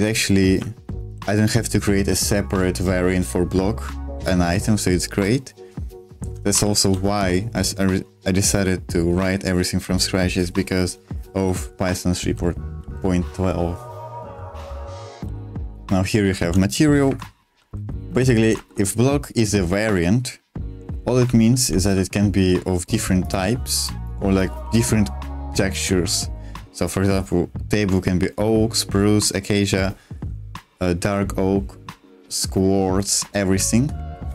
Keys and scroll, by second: 0.6 l, 0.9 h, 6.5 ctrl+o, 11.3 j, 11.8 j, 12.7 j, 15.2-19.0 typing, 17.0 Escape, 21.3 super+2, 33.3 super+1.